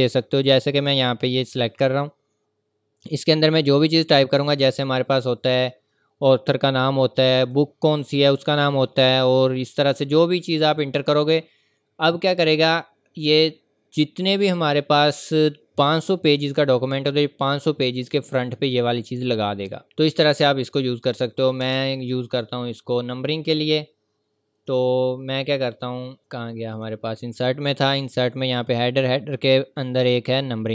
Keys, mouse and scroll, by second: 1.5 click, 7.4 click, 16.5 click, 16.5-17.0 scroll down 1, 17.0-18.2 scroll up 1, 18.2 click, 24.6 z, 24.6 click, 29.3-29.7 scroll down 1, 29.7 scroll up 1, 29.8-30.7 scroll down 1.